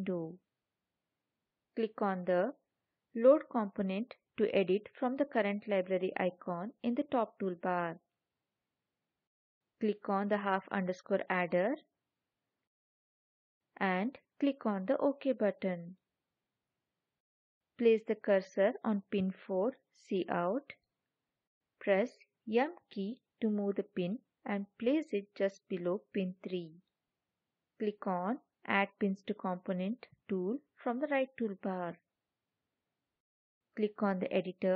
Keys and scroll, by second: 22.6 m.